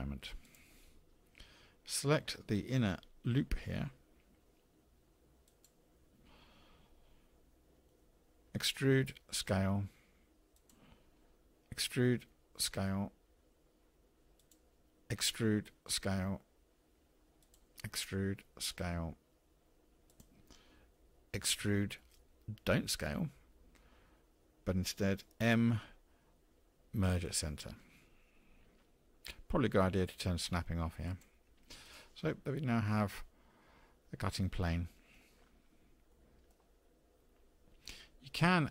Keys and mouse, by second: 0.4 click, 5.6 alt+click, 8.5 e, 11.9 e, 15.4 e, 17.9 e, 21.6 e, 25.5 m, 31.0 click, 31.9 click, 32.3-35.1 middle drag, 36.2 middle click.